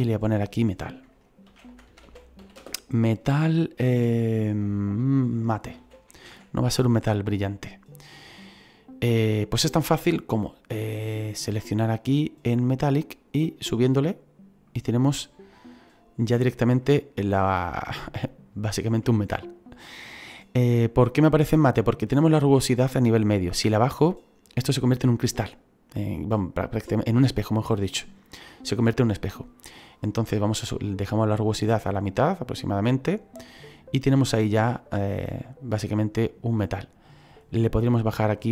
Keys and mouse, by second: 1.5-2.5 typing, 5.7 m, 5.8 a, 6.1 t, 6.2 e, 7.4 click, 12.9 click, 16.8 middle click, 17.8 middle click, 23.4 click, 29.9 click, 35.1 middle click.